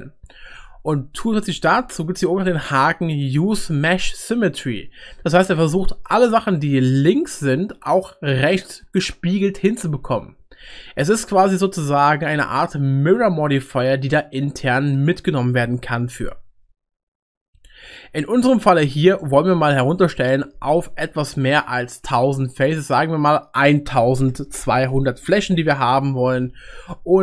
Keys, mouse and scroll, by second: 24.6 0.